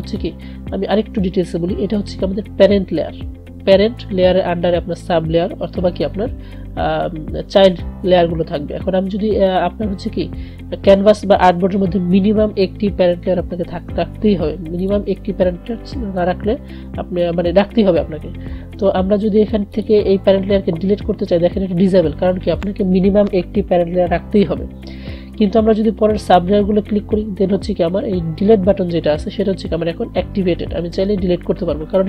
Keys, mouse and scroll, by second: 0.2 click, 9.6 click, 14.9 click, 19.9 click, 26.4 click.